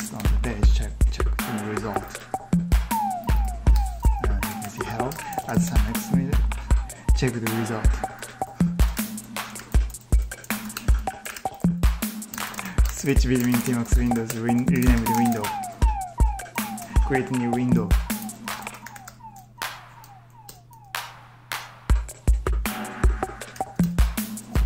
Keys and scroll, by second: 0.0 super+Tab, 3.6 super+Tab, 4.0-5.8 typing, 8.0 super+Tab, 8.7 ctrl+t, 9.3 ctrl+t, 10.0 ctrl+t, 11.1 ctrl+t, 11.3-13.9 typing, 13.5 ctrl+w, 13.6 ctrl+w, 13.7 ctrl+w, 14.5 ctrl+t, 14.7 ctrl+t, 15.0 ctrl+t, 15.2 ctrl+t, 16.4 ctrl+t, 17.8-19.4 typing, 20.3 Return, 23.3 typing, 24.5 ctrl+t.